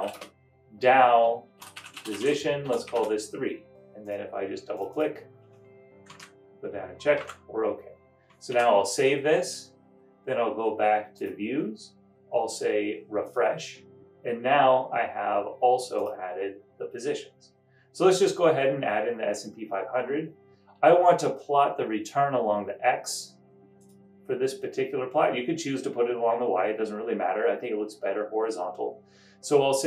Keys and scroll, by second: 0.9-3.9 typing, 6.3 super+Down, 7.4 super+Up, 8.7 super+s.